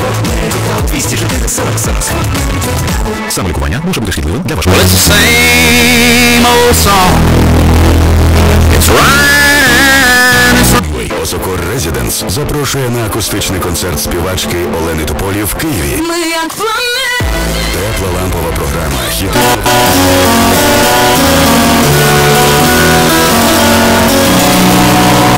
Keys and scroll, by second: 11.4 Page_Down.